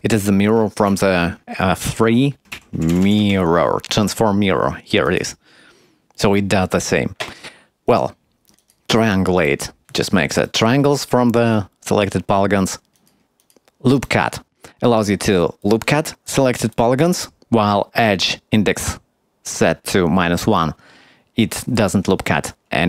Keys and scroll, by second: 1.0 F3, 2.2-3.8 typing.